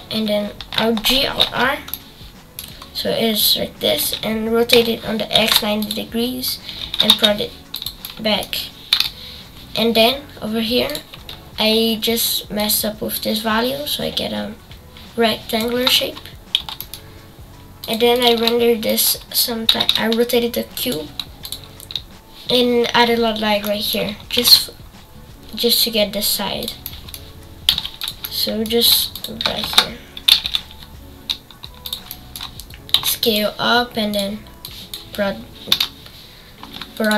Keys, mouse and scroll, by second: 1.1 alt+g, 1.2 alt+r, 1.9 middle click, 2.7-4.0 scroll up 1, 4.0 r, 6.5 scroll down 3, 6.8 g, 8.0 middle click, 8.9 KP_0, 12.7-15.6 drag, 15.9-16.5 scroll down 1, 16.5 g, 18.2 click, 18.5-18.9 scroll up 1, 18.9 click, 19.7 r, 21.5 click, 23.6 middle click, 24.2-25.9 scroll down 2, 26.6 shift+a, 26.8 middle click, 27.7 g, 28.2 middle click, 28.8 g, 29.4 t, 30.3 r, 32.0 middle click, 32.9 s, 34.7-35.7 drag, 35.7 KP_0, 37.1 click.